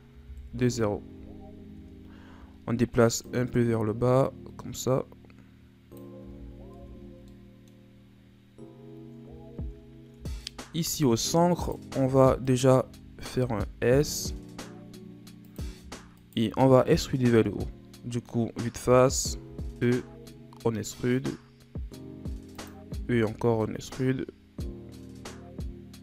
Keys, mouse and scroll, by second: 3.3-6.3 drag, 6.3 z, 6.8 Tab, 7.1 scroll down 2, 7.3 middle click, 8.1 scroll up 4, 9.5-10.2 scroll up 6, 10.2 Tab, 10.7-11.6 scroll up 1, 11.6 right click, 12.5 alt+right click, 13.4 s, 16.2 shift+right click, 17.3 KP_1, 19.5 e, 22.9 e.